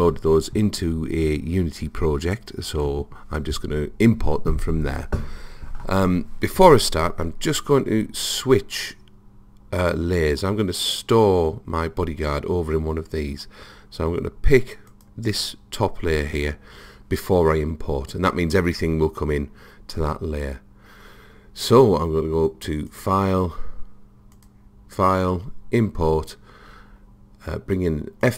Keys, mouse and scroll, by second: 14.9 click, 22.9-26.3 drag.